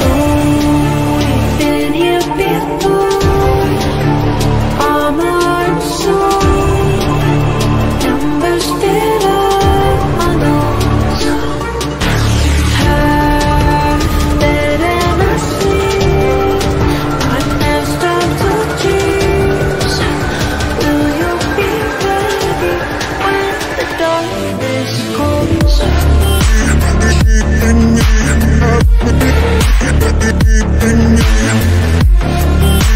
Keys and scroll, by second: 5.7 z, 13.9 shift+F2, 14.6 Escape, 15.1 F3, 15.5 Escape.